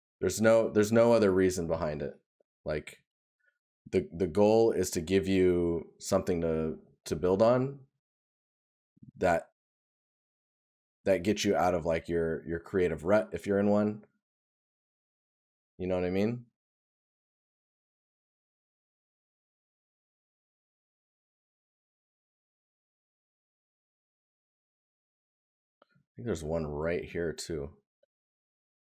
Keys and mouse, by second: 11.2 right click, 17.6 right click.